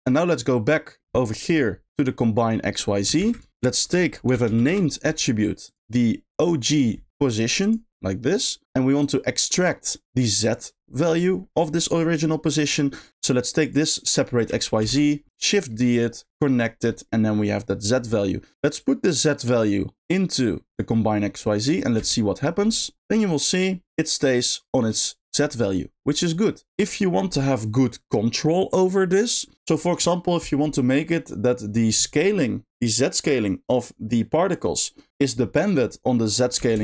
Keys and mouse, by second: 0.4 middle click, 1.4 middle click, 3.2 shift+a, 5.8-7.7 drag, 8.0 click, 9.2 click, 11.6 middle click, 13.6 click, 15.5 shift+click, 15.8 shift+middle click, 16.3 shift+click, 16.4 shift+click, 17.0 shift+middle click, 18.1 middle click, 19.1 click, 19.3-20.8 drag, 22.0 space, 23.3 middle click, 26.2 middle click, 36.6 s.